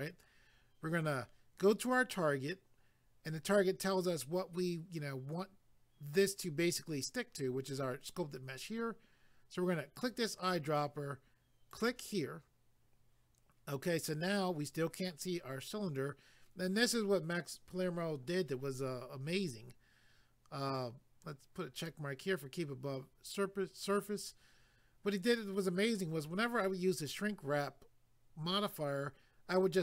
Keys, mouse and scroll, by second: 10.0 click, 11.7 click, 21.8 click.